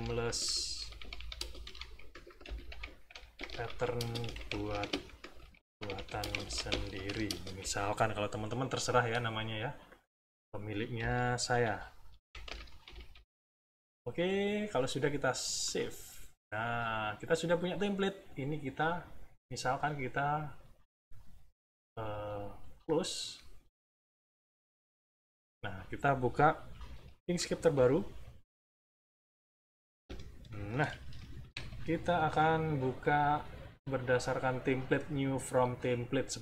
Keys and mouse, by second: 0.0-7.5 typing, 9.8 click, 11.4-13.6 typing, 15.6 click, 22.7 click, 24.4 click, 27.2 i, 30.2 Left, 31.3 Page_Up, 33.0 click, 35.3 click.